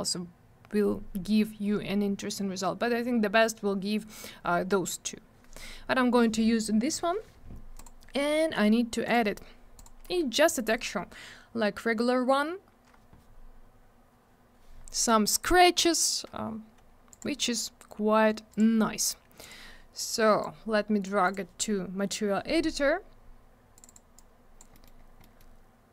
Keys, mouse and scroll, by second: 7.7 click, 7.8 click, 9.0 click, 9.1 click, 9.7 click, 9.8 click, 10.4 click, 10.5 click, 10.5 click, 10.6 click, 14.7-15.7 scroll up 1, 15.7 scroll down 1, 17.1 click, 17.2 click, 18.5 click, 18.5 click, 19.4 click, 19.4 click, 20.4 click, 21.2 click, 21.3 click, 23.7 click, 23.8 click, 23.8 click, 23.9 click, 24.1 click, 24.7 middle click, 24.8 middle click, 25.0 scroll down 1, 25.2 middle click, 25.3 middle click.